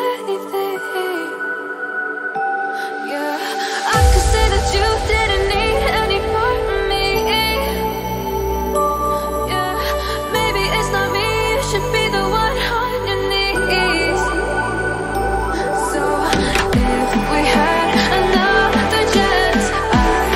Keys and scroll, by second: 13.5 Return, 18.3 ctrl+alt+0, 19.4 ctrl+0.